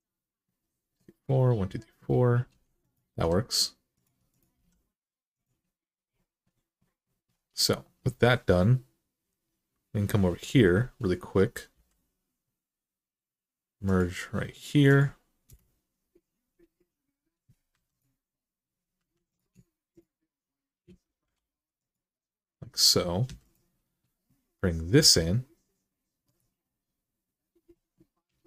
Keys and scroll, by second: 2.9 g, 4.4 g, 11.5 k, 15.2 Return, 17.5 2, 18.7 1, 21.0 m, 23.0 2, 24.8 e.